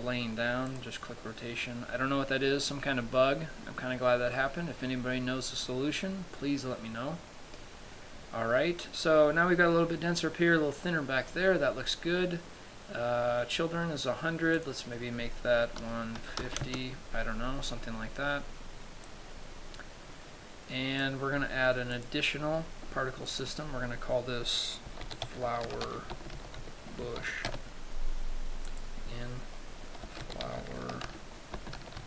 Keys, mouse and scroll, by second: 1.2 click, 13.4-15.1 scroll down 2, 15.1 click, 19.5 click, 22.4 click, 23.8 click, 29.2 click.